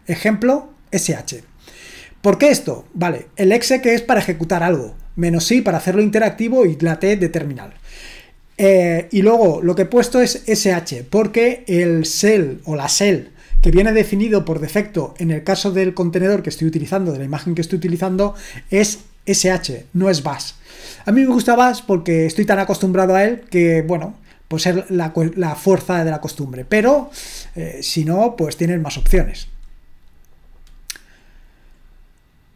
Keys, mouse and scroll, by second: 29.4-30.2 scroll down 1, 30.2-31.0 scroll down 1, 31.0-31.9 scroll down 1, 31.9-32.5 scroll down 1.